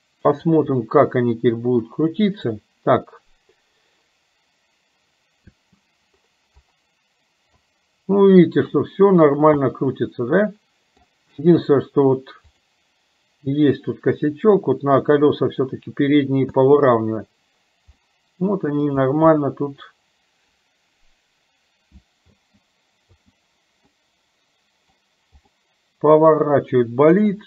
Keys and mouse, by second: 0.0 click, 0.8-2.0 middle drag, 5.6 space, 7.6-8.7 middle drag, 9.7-11.1 middle drag, 11.3 space, 12.6 click, 14.5-15.8 drag, 16.7 space, 18.0-19.0 middle drag, 19.3 middle click, 22.3 space, 23.1 space, 24.0-25.1 middle drag, 25.5-27.3 middle drag.